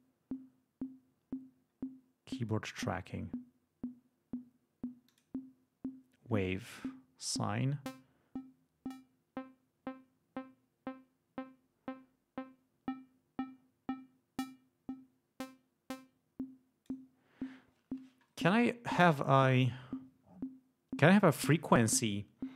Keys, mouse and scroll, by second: 2.5 click, 5.0 click, 6.5-7.0 scroll up 2, 7.3-17.0 drag.